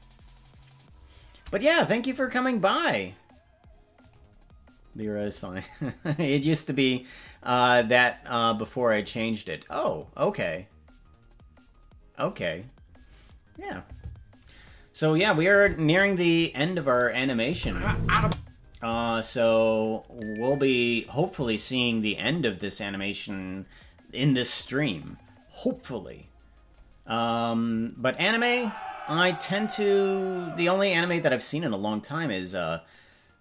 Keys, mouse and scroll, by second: 15.6 click, 17.5 space, 18.2 space.